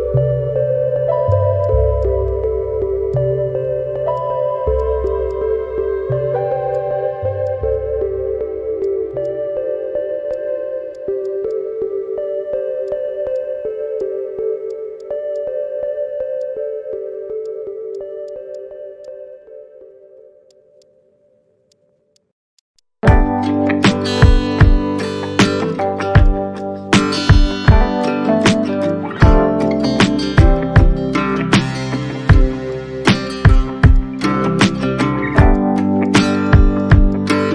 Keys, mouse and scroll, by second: 0.9 Tab, 0.9 middle click, 1.0 Tab, 2.0 shift+click, 3.1 alt+click, 3.5 scroll up 1, 5.0 alt+click, 5.1 alt+middle click, 5.8 Tab, 6.2 scroll down 1, 6.5 ctrl+z, 6.7 Tab, 7.4 Tab, 7.9 Tab, 7.9 middle click, 9.2 shift+click, 10.3 alt+click, 10.9 alt+click, 11.2 alt+click, 11.4 alt+middle click, 12.4 middle click, 12.5 Tab, 12.9 alt+click, 14.4 ctrl+scroll up 1, 15.3 scroll, 15.3 shift+click, 16.1 shift+middle click, 16.5 alt+click, 17.0 Tab, 17.0 middle click, 18.2 alt+click, 18.5 alt+click, 19.0 shift+click, 20.5 alt+click, 21.3 scroll up 1, 21.4 Tab, 22.8 alt+click, 23.3 middle click, 23.6 Tab, 23.6 alt+click, 24.6 shift+click, 25.7 shift+click, 26.2 alt+click, 26.5 alt+middle click, 26.6 alt+click, 27.1 shift+middle click, 27.6 shift+middle click, 28.3 Tab, 28.8 alt+click, 29.9 shift+click, 30.5 alt+click, 30.9-31.2 scroll up 1, 31.2 Tab, 31.2 middle click, 31.3 Tab, 31.6 alt+click, 33.3 shift+click, 34.1 shift+click, 35.7 alt+middle click, 36.6 scroll down 1, 36.7 alt+click, 36.9 scroll up 1.